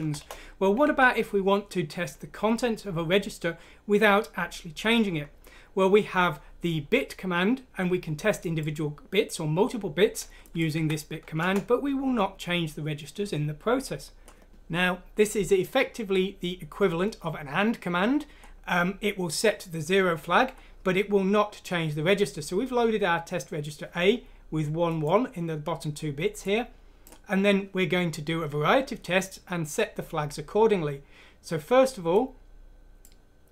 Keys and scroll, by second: 0.1 Return, 0.8 Escape, 10.7 F6, 11.4 Return.